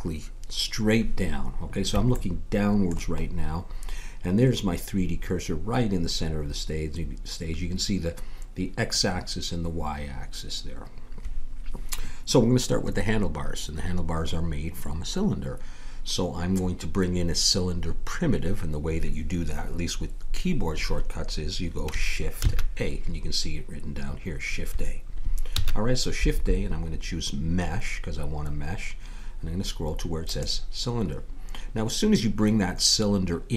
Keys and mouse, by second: 2.1-6.7 middle drag, 22.4 shift+a, 25.5 shift+a.